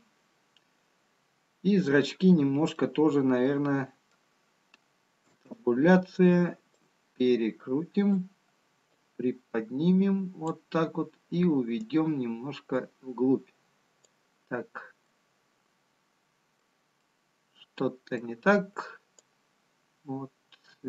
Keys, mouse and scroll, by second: 0.0 click, 3.3 middle click, 9.5 click, 12.9 click, 15.6 middle click, 17.6 middle click, 19.2 click.